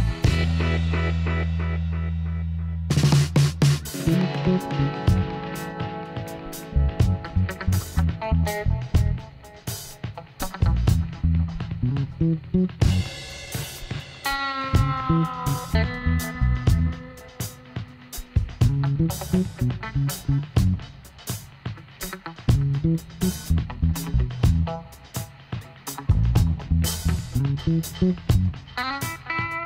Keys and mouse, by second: 0.8 f, 1.4 middle click, 2.4 z, 4.4 ctrl+r, 7.8 ctrl+r, 8.9 middle click, 9.6-10.9 drag, 11.0-12.8 right drag, 14.0-15.8 drag, 16.1 s, 23.6-26.7 drag, 27.7 s.